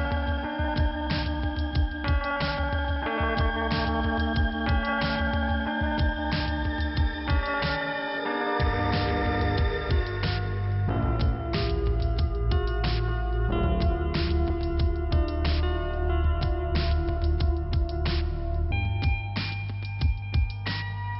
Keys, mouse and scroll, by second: 3.0 middle click, 3.8 scroll up 1, 5.7 click, 8.0 click, 8.7 click, 12.3 click, 13.2 click, 15.8 click, 15.9 click, 16.4 click, 17.6 click, 20.8 click, 20.9 click.